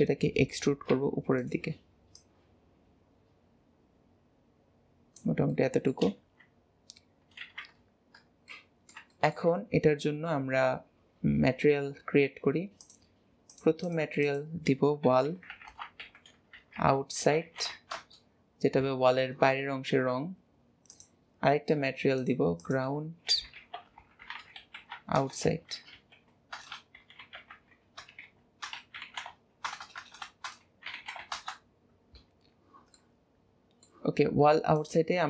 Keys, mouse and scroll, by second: 0.2 shift+middle click, 0.8 e, 2.1 click, 5.5 middle click, 6.2 alt+z, 7.4 alt+z, 8.5-9.5 middle drag, 9.5 Tab, 10.0-12.8 scroll up 1, 12.8 click, 13.8-15.6 drag, 15.6 l, 20.9-25.8 drag, 26.7 BackSpace, 29.8 BackSpace, 29.9 BackSpace, 32.9-34.8 middle drag, 34.8 click.